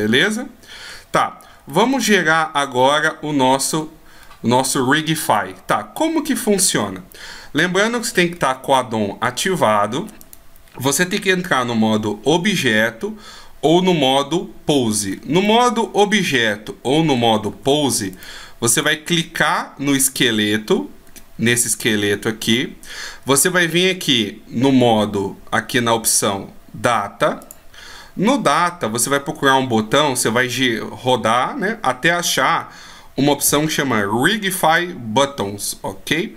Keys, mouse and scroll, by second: 1.2-1.7 scroll down 2, 1.7 middle click, 3.8-4.2 scroll down 1, 4.2-4.6 scroll up 3, 6.9 right click, 7.9 scroll down 1, 10.2 right click, 15.1-15.4 scroll up 2, 15.4 middle click, 17.5 Tab, 18.1 right click, 18.7 right click, 21.3 middle click, 27.4 click, 28.6-30.6 scroll down 1.